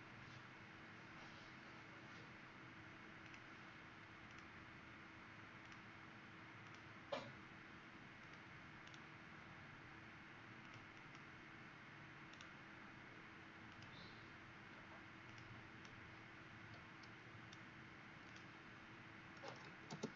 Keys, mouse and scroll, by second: 8.7 right click, 10.5 click, 10.9 click, 12.2 right click, 13.6 click, 15.7 right click, 18.2 click, 19.1-20.0 typing.